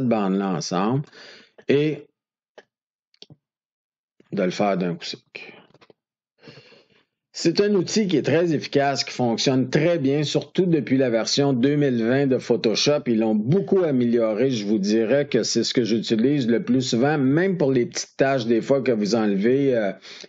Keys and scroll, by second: 2.4 F2, 5.5 ctrl+d.